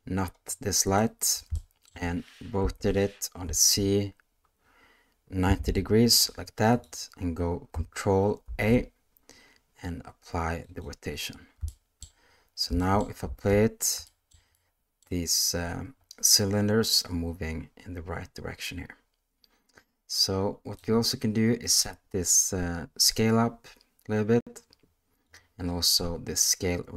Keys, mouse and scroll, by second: 0.6-1.0 ctrl+drag, 1.5-1.9 shift+middle drag, 2.6 r, 8.4 ctrl+a, 11.7-12.0 shift+middle drag, 12.8 shift+middle click, 13.2 space, 14.1 shift+middle drag, 14.5-15.0 middle drag, 20.8-21.8 drag, 23.1-25.3 drag, 26.3-26.9 drag.